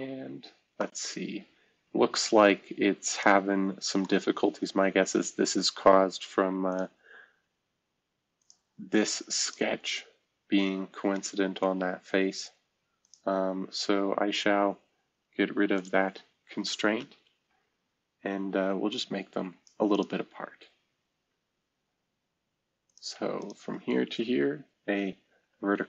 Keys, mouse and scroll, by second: 0.0-0.3 scroll down 2, 0.3-0.7 scroll up 1, 6.6 click, 8.3 click, 13.8 scroll down 1, 14.7-15.7 scroll down 2, 17.1 Delete, 18.8 click, 25.3 shift+v.